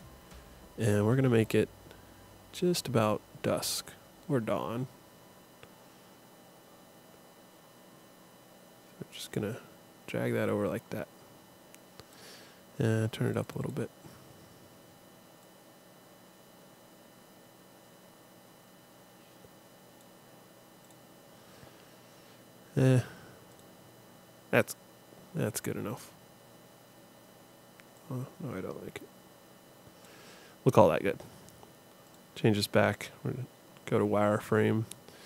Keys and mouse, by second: 13.3-16.8 drag, 21.8 click, 22.7 middle click, 23.5-25.4 drag, 25.4 middle click, 25.9-28.0 drag, 32.1 click, 32.9-34.0 drag.